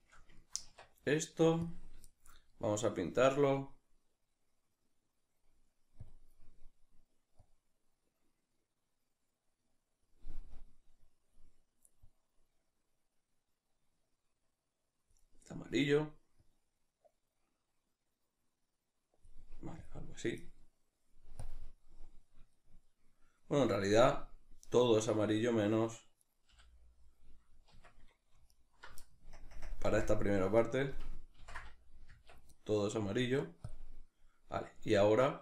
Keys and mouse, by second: 1.7 Tab, 1.7-7.4 middle drag, 7.4-22.5 drag, 22.5-26.2 shift+middle drag, 26.2 right click, 26.5 l, 28.5 right click, 29.3 KP_Add, 29.8 KP_Subtract, 31.4 i, 32.3 Tab, 33.7-34.8 drag, 34.8-35.4 shift+middle drag.